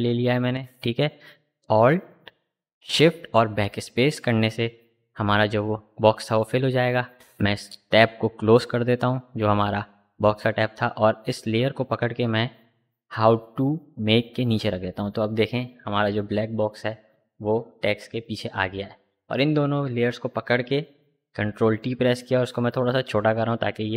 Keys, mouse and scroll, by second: 4.6 scroll down 1, 6.3 click, 12.7-16.4 drag, 17.5 ctrl+t, 19.2-23.9 alt+drag.